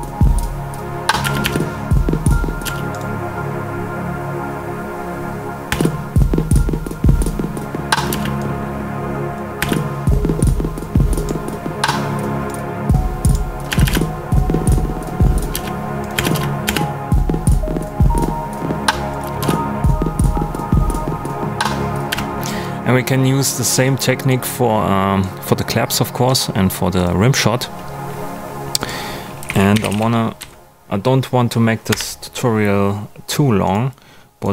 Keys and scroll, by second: 1.2 space, 2.6 space, 5.6 space, 8.0 space, 9.5 space, 13.6 space, 15.5 space, 19.2 space, 22.1 space, 29.1-30.3 typing, 31.9 Return.